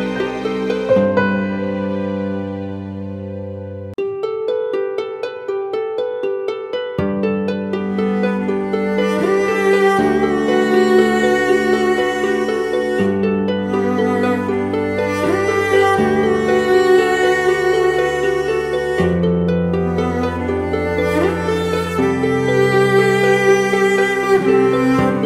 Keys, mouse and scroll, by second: 5.6-6.0 alt+scroll up 1, 10.6-11.2 typing, 11.7 double click, 16.2 ], 16.3 ], 16.5 ], 17.3 double click, 22.7 scroll up 1.